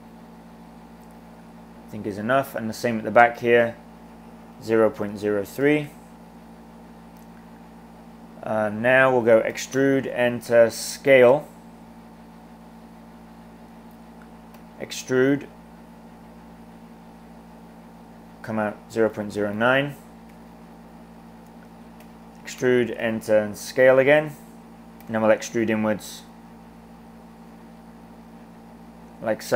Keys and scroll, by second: 3.4-5.9 typing, 9.6 e, 10.4 s, 14.6 e, 18.6-20.0 typing, 22.1-22.9 typing, 25.1 e.